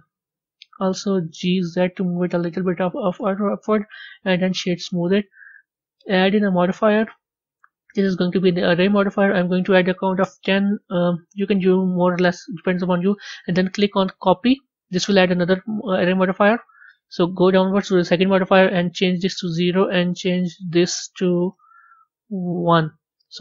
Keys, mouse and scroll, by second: 3.1 Tab, 3.7 right click, 4.8-6.1 middle drag, 6.1 click, 6.8-12.2 drag, 14.1-14.5 drag, 15.2-17.2 scroll down 10, 17.2-18.3 scroll down 3, 18.3-21.5 drag, 21.5 BackSpace, 21.7 BackSpace, 23.2-23.4 middle drag.